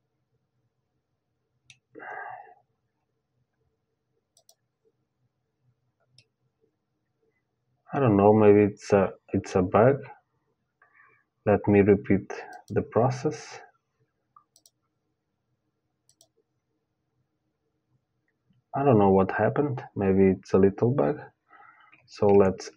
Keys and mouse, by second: 3.9-6.1 drag, 5.8-7.9 middle drag, 12.1-16.1 drag, 21.9 ctrl+z, 22.4 ctrl+z.